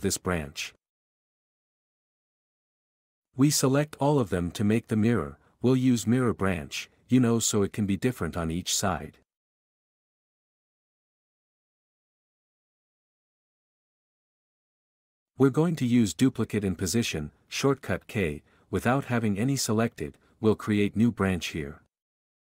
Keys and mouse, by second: 1.7 shift+r, 1.9 shift+r, 2.8 Escape, 4.5 shift+right click, 7.7-10.3 drag, 12.3 r, 12.5 r, 13.3 Escape, 15.1 alt+a, 16.4 k, 17.2 s, 18.2 s, 19.4-22.2 typing.